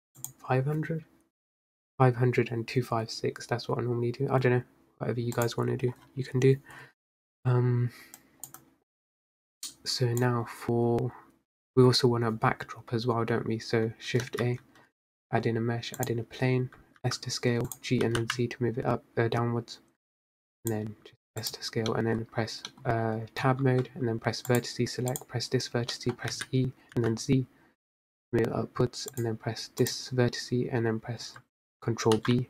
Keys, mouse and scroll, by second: 0.6 o, 10.9 scroll up 2, 16.5 shift+a, 17.3 s, 18.4 g, 21.4 s, 22.4 middle click, 22.9-23.4 scroll down 1, 23.4 middle click, 23.5-23.9 scroll up 1, 24.1 Tab, 25.4 click, 26.7 middle click, 26.9 scroll down 2, 27.1 e, 30.8 click.